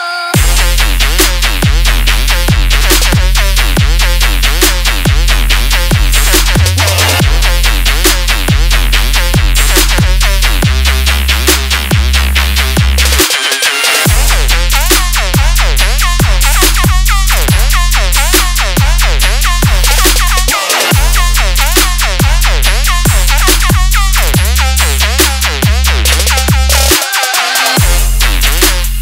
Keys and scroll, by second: 2.5 ctrl+space, 23.3 ctrl+j.